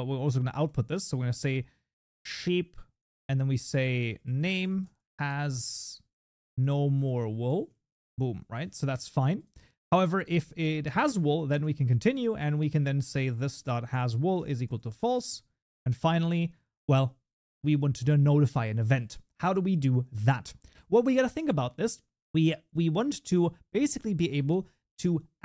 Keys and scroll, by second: 4.5 Tab, 7.8 ctrl+s, 14.3 Tab.